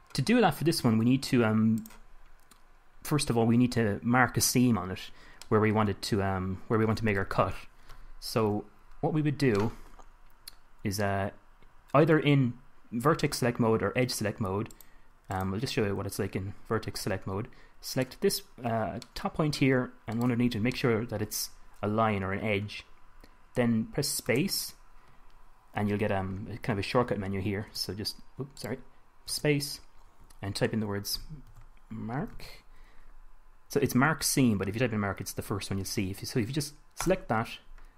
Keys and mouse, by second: 2.1-5.8 drag, 5.8-7.0 middle drag, 8.8 KP_1, 17.2 a, 21.3-22.5 middle drag, 24.6 space, 29.7 space.